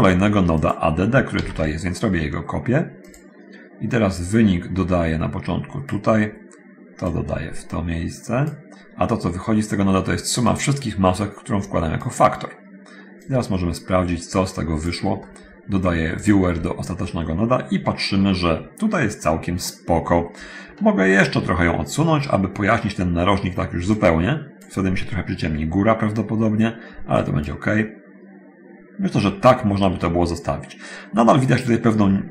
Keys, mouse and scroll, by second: 0.6 click, 1.6 shift+d, 3.3 click, 4.6-6.3 drag, 7.3-8.8 drag, 10.7-12.4 drag, 13.4-15.2 drag, 15.4 middle click, 16.4 ctrl+shift+click, 19.8-21.1 middle drag, 24.2 click, 27.4 click, 30.2 scroll up 1.